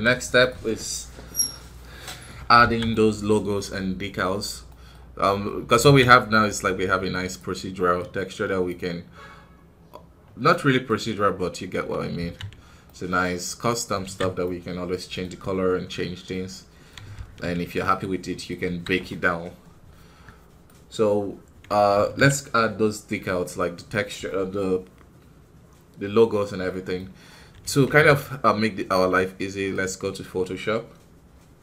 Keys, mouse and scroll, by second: 0.3-2.5 right drag, 2.5 alt+a, 2.8-6.1 middle drag, 6.1-7.9 right drag, 7.9 click, 10.4-12.1 middle drag, 12.1 ctrl+z, 12.8-15.2 middle drag, 15.2-16.1 scroll up 1, 16.1 scroll up 1, 16.4-18.5 middle drag, 18.5 KP_1, 19.8 scroll down 1, 20.5 middle click, 21.2-23.9 scroll up 1, 26.6-31.6 middle drag.